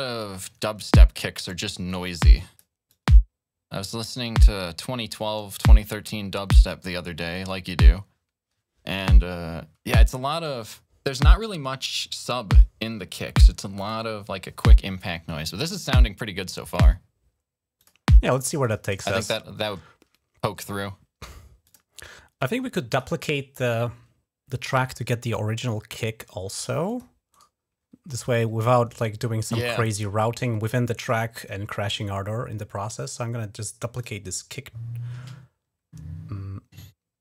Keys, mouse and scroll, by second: 0.0 click, 1.7 click, 2.7-5.3 drag, 13.6 click, 15.7 click, 17.6 click, 18.4 click, 18.9 space, 21.5 click, 22.7 click, 26.7 click, 27.1 right click, 33.8 click.